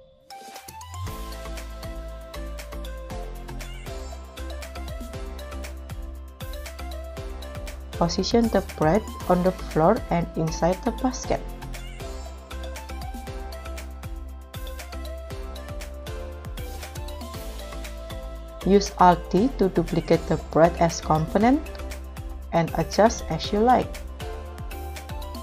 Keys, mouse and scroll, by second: 0.1 right click, 0.2-0.6 scroll down 5, 1.1 middle click, 1.5-1.9 scroll down 4, 1.9 scroll up 3, 2.8 shift+a, 4.7 s, 6.3 KP_0, 8.8 click, 8.8 g, 9.2 z, 10.4-13.7 typing, 15.1 g, 15.3 y, 15.8 x, 17.8 KP_3, 19.0 alt+d, 21.3-23.0 scroll up 3, 23.1 KP_1, 24.2 r, 24.8 g, 24.8 z, 25.0 x.